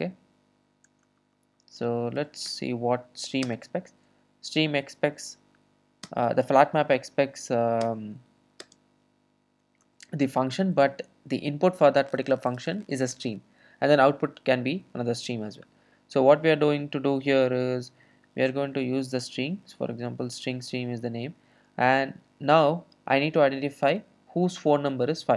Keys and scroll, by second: 7.8 ctrl+alt+space, 8.8 ctrl+alt+space, 10.1 Return, 19.3 Return.